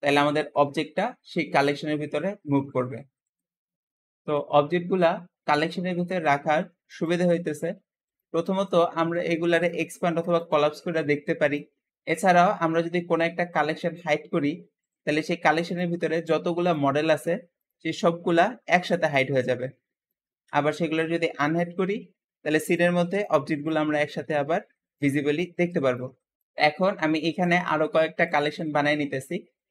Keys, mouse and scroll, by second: 3.1 click, 6.0 click, 6.8 click, 8.0 click, 8.5 click, 9.6 click, 10.3 click, 11.3 click, 13.9 click, 14.7 click, 15.6 click, 16.0 click, 16.5 click, 17.5 click, 21.3 click, 27.3 click, 28.2 click.